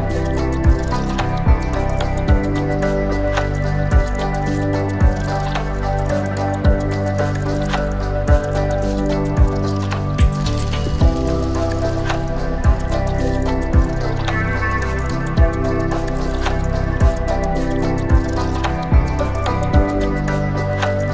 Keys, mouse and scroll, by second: 1.3 click, 2.0 click, 3.1-5.3 middle drag, 6.0 KP_1, 7.2 shift+middle click, 9.3-9.9 scroll down 2, 9.9 Tab, 10.4 click, 13.0-13.7 shift+middle drag, 16.8-18.9 scroll down 3, 17.4-20.0 middle drag, 20.6 click.